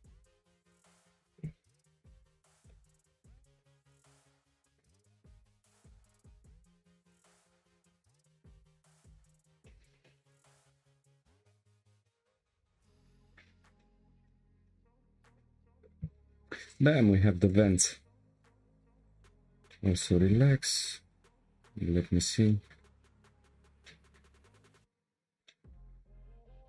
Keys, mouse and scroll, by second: 0.0 click, 0.8 ctrl+click, 2.3 Delete, 2.7-5.8 middle drag, 5.8 2, 6.5 1, 7.1 click, 8.0 ctrl+click, 9.2 shift+click, 9.6-11.2 middle drag, 11.2 shift+click, 12.1 g, 15.8 2, 16.7 click, 17.4 ctrl+click, 19.7-20.4 middle drag, 20.4 Tab, 21.2 click, 21.8-22.4 scroll down 7, 22.4-22.9 shift+middle drag, 22.9-23.8 scroll up 4, 23.8-25.9 shift+middle drag, 25.9-26.4 scroll up 4.